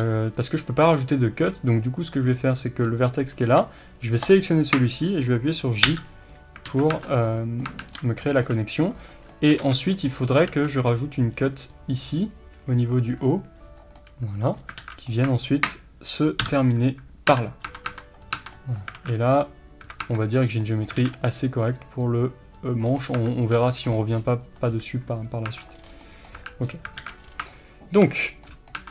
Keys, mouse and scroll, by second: 4.3 shift+click, 5.8 j, 6.7 alt+a, 7.0 Tab, 7.0 scroll down 1, 7.3-9.1 middle drag, 7.7 Tab, 8.0 scroll up 1, 8.6 scroll down 1, 9.6 alt+a, 9.9-15.2 middle drag, 10.5 ctrl+r, 14.8 alt+a, 15.2 click, 16.5 j, 17.3 Tab, 17.6 scroll down 1, 18.6-28.9 middle drag, 18.9 alt+a, 19.3 scroll down 1, 20.0 Tab, 20.3 scroll down 1, 21.0 alt+a, 23.0 scroll up 1, 23.2 Tab, 23.9 scroll up 1, 25.5 Tab, 25.8 scroll down 1, 26.4 Tab, 26.6-27.0 scroll up 1, 27.0 alt+a, 27.2 scroll down 1, 28.2 scroll down 1, 28.8 Tab.